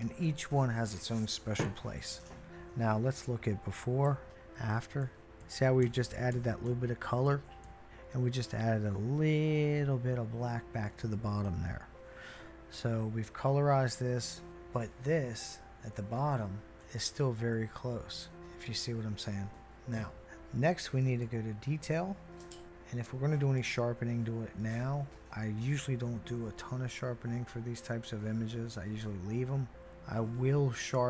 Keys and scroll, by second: 4.0-8.4 typing, 11.5 \, 16.4 \, 17.0 \, 17.5-18.4 \, 20.0 \.